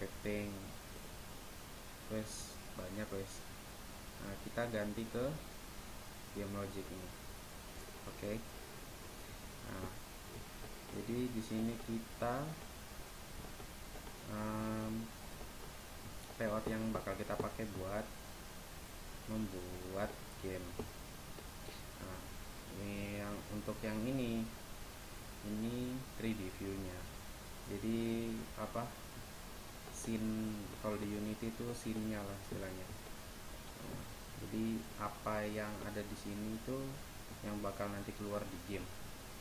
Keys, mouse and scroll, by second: 10.7-11.6 middle drag, 11.7-14.9 middle drag, 18.2-19.7 middle drag, 29.6-30.4 middle drag, 31.1-33.2 middle drag, 35.6 middle click, 35.8 middle click.